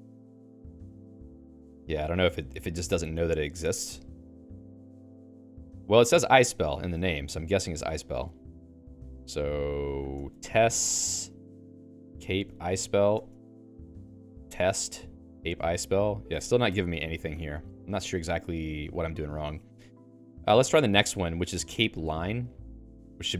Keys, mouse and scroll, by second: 0.6 q, 1.2 q, 7.5-13.4 typing, 11.7 alt+x, 14.5 t, 15.1 alt+x, 15.8 Return, 16.7 Escape, 17.2-20.4 typing, 18.7 ctrl+s, 21.7 j, 23.0-23.3 typing.